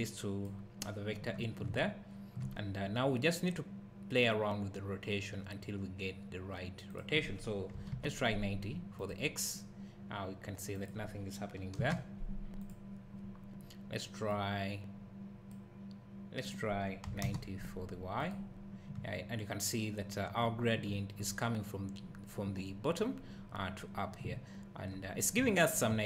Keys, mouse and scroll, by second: 1.6 `, 6.9 click, 19.4 `.